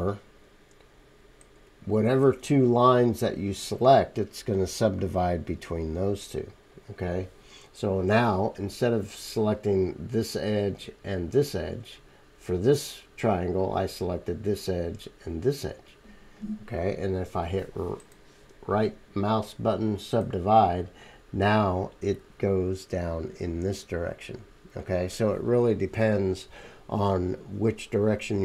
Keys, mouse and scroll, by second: 0.2-28.4 middle drag.